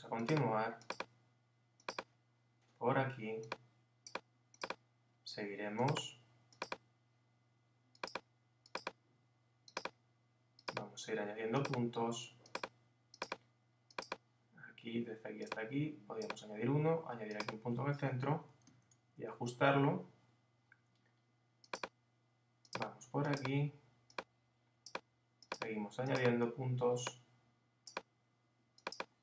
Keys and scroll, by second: 18.3 Up.